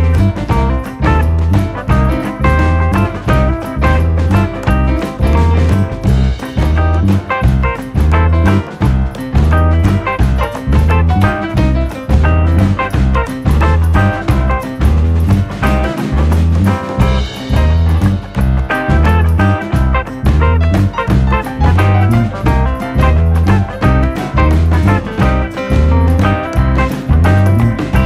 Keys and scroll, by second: 1.9-2.9 scroll, 3.9 alt+[, 4.9 b, 5.7 ctrl+=.